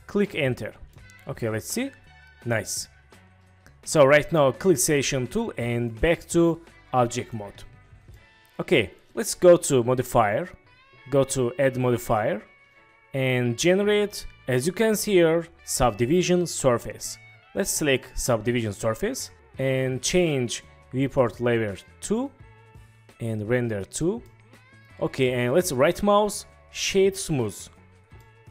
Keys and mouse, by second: 0.3 Return, 1.0-2.9 drag, 2.9-3.9 middle drag, 4.8 middle click, 5.9-7.3 middle drag, 8.1-8.7 drag, 10.0 click, 11.8-18.1 drag, 21.7 click, 24.3-24.8 middle drag, 25.8-27.5 drag, 28.2-28.5 middle drag.